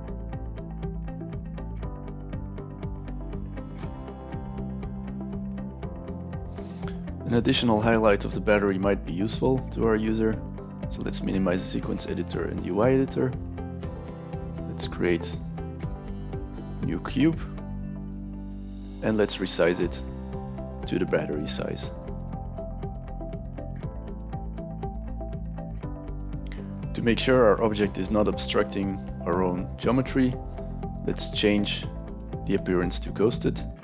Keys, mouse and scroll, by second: 1.6 click, 2.2 click, 2.5 click, 2.7 click, 3.1 t, 3.3 drag, 4.4 drag, 4.6 click, 6.0 click, 10.4 click, 11.8 click, 12.7 click, 13.8 click, 17.0 click, 19.4-19.8 alt+right drag, 20.0-20.4 alt+middle drag, 20.4 alt+drag, 20.8 alt+right drag, 21.6 alt+right drag, 21.9 alt+right click, 22.7 alt+right click, 22.8 alt+click, 23.2 click, 23.5 click, 23.6 click, 23.8 click, 24.0 click, 24.5 click, 24.6 click, 24.9 alt+click, 25.1 click, 25.2 alt+click, 25.6 alt+click, 25.7 alt+right click, 31.9 click, 33.2 click.